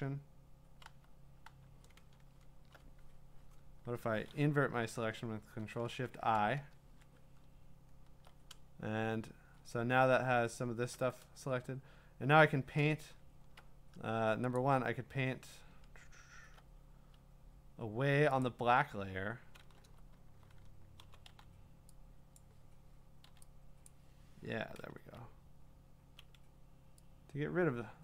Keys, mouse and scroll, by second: 2.6 scroll, 2.6 typing, 5.4 ctrl+shift+i, 7.1-8.1 scroll, 8.8 scroll, 8.9 scroll down 2, 10.0-10.8 scroll down 9, 11.9 scroll down 4, 13.0-13.4 scroll up 3, 13.6 scroll, 14.6 click, 15.7-16.3 scroll, 18.5 click, 19.8 n, 19.8-21.5 drag, 20.8-23.3 typing, 22.4 click, 23.9 click, 25.1-26.2 ].